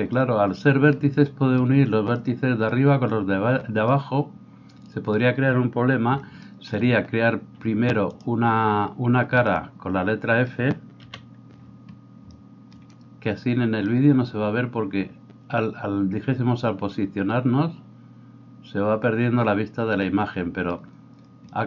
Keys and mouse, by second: 11.0 KP_1.